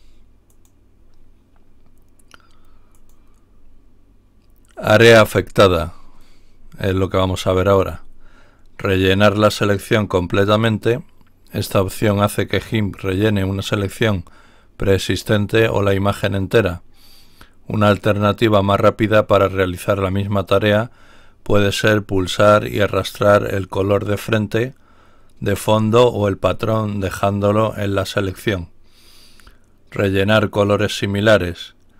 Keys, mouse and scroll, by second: 0.4 click, 2.9 click, 6.3-7.0 scroll down 2, 7.4-7.7 scroll down 2, 7.7-11.1 middle drag, 22.8-24.5 drag.